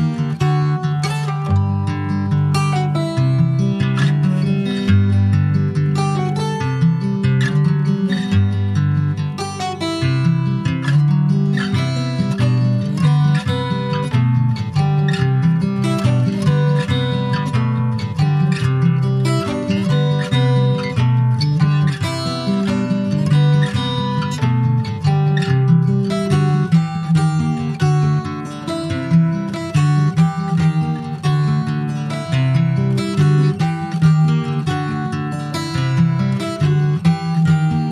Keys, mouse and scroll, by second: 1.0 s, 6.4 middle click, 7.1 click, 8.3 s, 10.4 click, 12.8-15.2 middle drag, 15.2 click, 16.4 click, 16.9-18.0 middle drag, 18.0 e, 18.9 scroll down 4, 19.0 alt+middle click, 19.4 alt+middle click, 20.2 alt+middle click, 21.6 ctrl+s, 22.0 click, 22.8-23.2 scroll down 3, 23.2 shift+middle click, 23.8 click, 24.6 middle click, 25.0 ctrl+s, 25.8 /, 26.3 scroll down 2, 26.6 middle click, 26.8 scroll up 1, 26.9 scroll down 2, 27.4 shift+middle click, 27.6 scroll down 2, 27.8 middle click, 28.7 ctrl+s, 28.8 scroll down 2, 29.1 middle click, 29.8 click, 30.7-31.5 scroll up 4, 31.1 middle click, 31.5 ctrl+s, 32.0 /, 32.5-33.8 middle drag, 33.8 click, 34.7 2, 35.1 click, 35.6-36.7 middle drag, 36.7 click, 37.1 middle click.